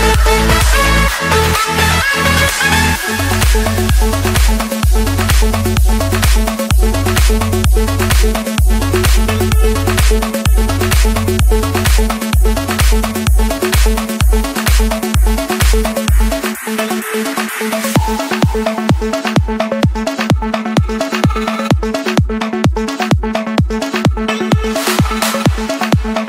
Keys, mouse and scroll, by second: 1.1 click, 1.5 Return, 1.7 Return, 3.8 click, 4.8 click, 6.5 click, 6.9-7.5 scroll, 7.9 Escape, 9.0-9.6 typing, 11.5-12.6 drag, 12.6 click, 13.1 Return, 13.6 Return, 14.0 Return, 16.1 click, 16.6 Return, 16.9 Return, 17.3 Return, 18.6 click, 18.9 Return, 19.2 Return, 21.3 Escape, 22.8 click, 24.5 click, 24.8-25.5 scroll, 25.5 middle click, 25.6 middle click, 25.9 scroll.